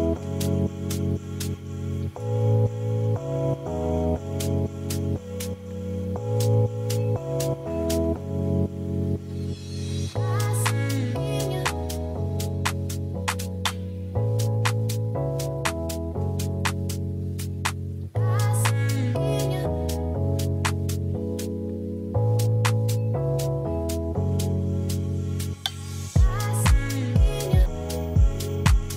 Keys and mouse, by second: 1.7 ctrl+s, 8.7 click, 9.4-10.9 drag, 12.0 click, 15.2-17.5 drag, 18.1-20.1 drag, 24.9-27.3 drag, 26.7 0.